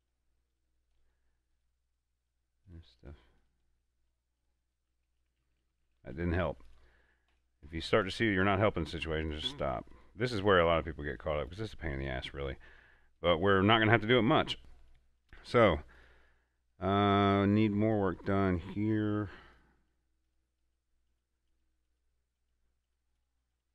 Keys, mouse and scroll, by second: 0.9-3.0 drag, 5.6 ctrl+z, 6.9-23.2 drag.